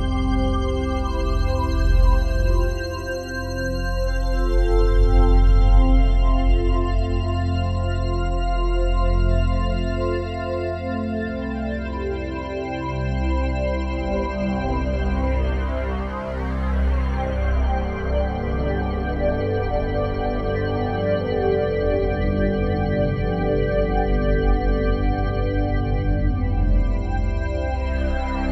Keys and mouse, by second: 0.0-0.3 typing, 1.4-3.4 drag, 3.7 click, 4.3-4.9 typing, 6.0 click, 7.3 click, 8.3 click, 8.7 click, 9.5-9.9 typing, 11.0 click, 12.2-17.1 drag, 17.3-27.6 drag, 28.0 click.